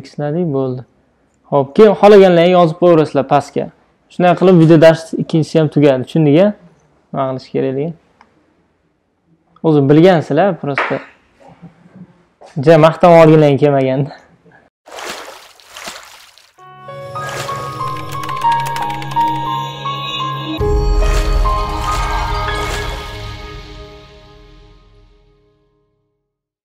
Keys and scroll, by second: 0.0 super+d.